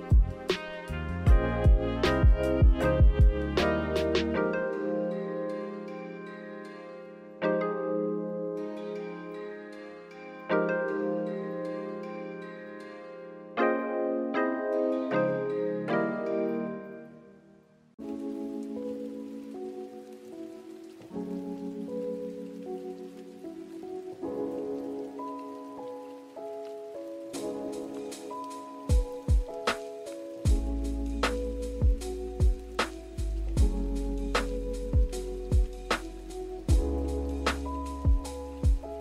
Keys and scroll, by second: 1.3 z, 4.1 z, 4.5 g, 9.7 z, 12.0 v, 17.4 z, 32.1 v.